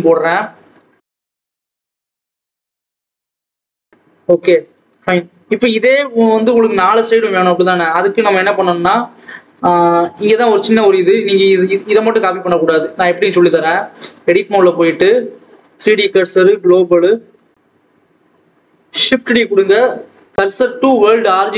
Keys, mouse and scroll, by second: 2.1 click, 2.6 h, 3.1 click, 4.0-4.6 scroll down 1, 4.6 click, 5.4 click, 6.5-7.1 scroll down 3, 7.1-8.1 scroll up 2, 8.1 KP_7, 11.6 click, 14.0-17.0 drag, 17.0 scroll down 1, 17.2-17.8 scroll up 1, 17.8 scroll up 1, 18.0 scroll down 1, 18.3 a, 18.9 shift+d, 21.3 shift+s.